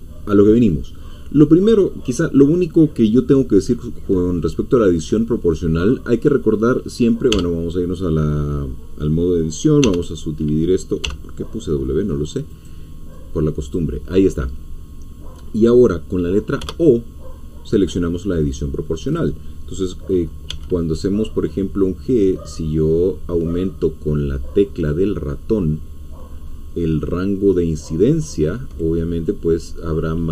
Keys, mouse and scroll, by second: 1.6 scroll up 2, 2.7-4.4 scroll down 2, 4.4-5.7 middle drag, 5.8-6.4 scroll up 2, 6.4-7.3 scroll up 1, 7.3 Tab, 9.8 w, 11.0 w, 12.5 click, 13.6-16.6 drag, 16.6 o, 19.2-20.5 drag, 20.5 g, 22.2-22.8 scroll down 2, 23.0-23.5 scroll down 2, 26.3-26.8 scroll up 2, 26.8 middle click, 26.9-27.2 scroll up 2, 29.2-29.6 scroll down 1.